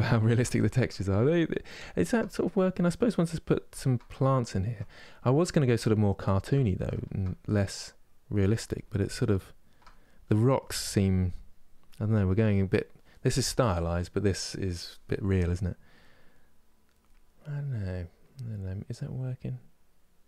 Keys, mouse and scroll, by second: 0.0 ctrl+space, 0.6-17.7 middle drag.